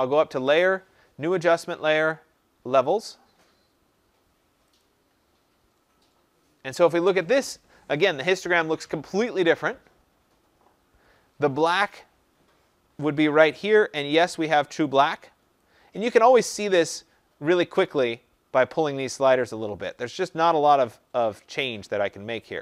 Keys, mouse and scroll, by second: 0.6 click, 4.8 click.